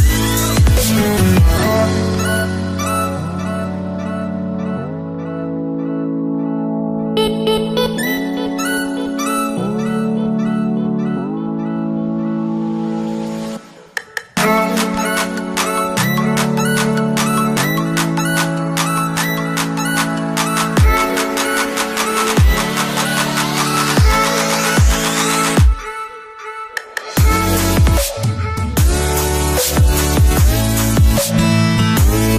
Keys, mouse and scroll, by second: 2.5 click, 4.2 shift+click, 9.0 click, 11.2 click, 12.2 right click, 14.3 click, 16.5 click, 19.6-20.2 drag, 22.9 Return, 24.7 click, 25.8-26.3 alt+scroll up 1, 27.2 click, 27.3 click, 29.9 click, 31.3 shift+click.